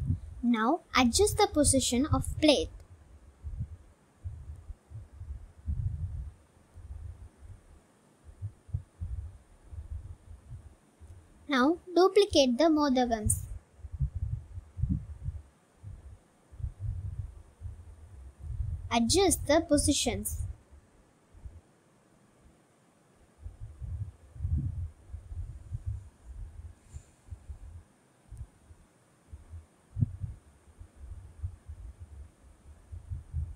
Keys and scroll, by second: 0.8 g, 1.1 z, 2.2 g, 2.4 x, 4.1 Tab, 6.1 g, 6.3 z, 8.3 i, 9.2 Tab, 12.8 7, 14.3 g, 14.4 y, 15.3 shift+d, 15.5 y, 16.8-20.8 typing, 21.9 g, 22.0 y, 22.9 shift+d, 23.1 y, 24.5 g, 24.7 y, 27.3-30.1 typing, 31.3 g, 31.7 x.